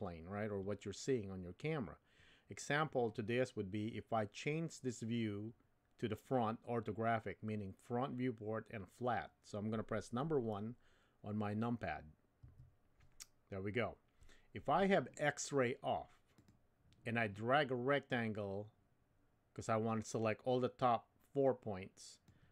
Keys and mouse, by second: 12.4 KP_1, 16.4 click, 18.1-22.5 drag.